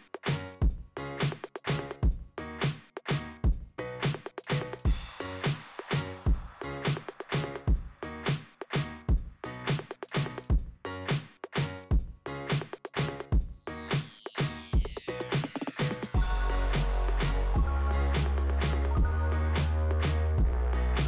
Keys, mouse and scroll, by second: 0.0 click, 5.7 scroll down 2, 12.9 scroll up 2, 14.9 click, 20.2 scroll down 1.